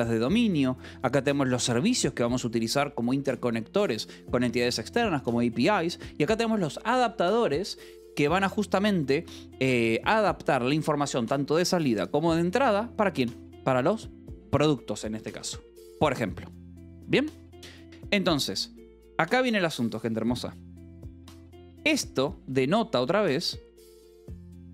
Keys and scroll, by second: 1.3 j, 2.2 shift+v, 4.2 Escape, 5.8 j, 6.2 j, 7.1 v, 8.3 Escape, 9.3 k, 14.2 j, 14.9 shift+v, 17.4 Escape, 23.0 shift+v.